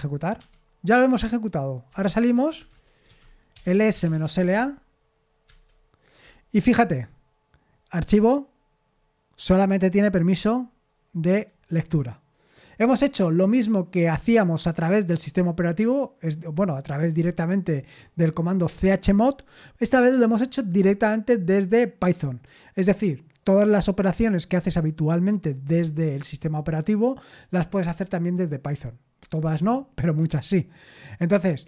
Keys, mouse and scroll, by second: 0.4 Escape, 2.1-4.9 typing, 5.4 Return.